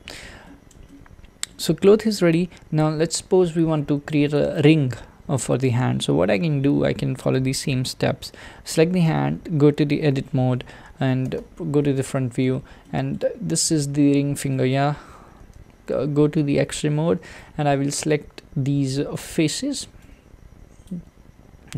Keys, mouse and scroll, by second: 0.4-1.7 shift+middle drag, 1.7-2.1 scroll down 1, 2.1-4.3 middle drag, 4.3 click, 9.1 Tab, 12.2-12.8 scroll up 4, 12.8 shift+middle click, 13.4-14.0 scroll up 6, 14.5-15.5 shift+middle drag, 15.5 alt+z, 19.2 click, 20.9 click.